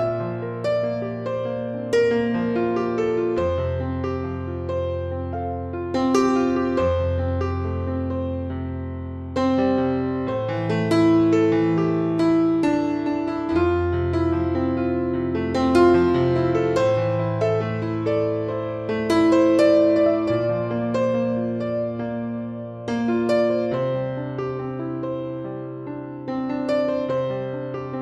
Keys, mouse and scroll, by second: 0.9 click, 1.1 scroll down 1, 1.1-2.8 middle drag, 1.9-2.2 scroll up 1, 2.8 click, 3.1 scroll down 1, 3.3-5.3 middle drag, 3.9 scroll up 1, 5.3 click, 6.5 click, 7.3 click, 7.9 click, 9.4 click, 10.0 click, 10.1-12.8 drag, 11.7 r, 12.9 click, 16.5 Tab, 16.7 a, 17.3 click, 17.9 Tab, 18.9 click, 19.6-21.6 middle drag, 19.6-21.3 scroll up 1, 21.6-28.0 drag.